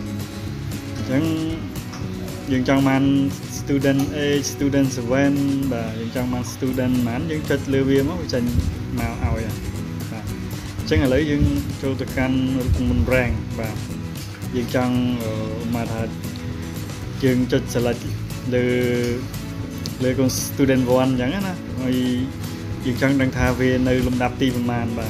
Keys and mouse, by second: 0.4 click, 1.4 click, 2.4 click, 3.1 click, 4.9 click, 6.2 click, 7.1 click, 8.2 click, 10.2-11.1 drag, 18.0-19.1 ctrl+drag.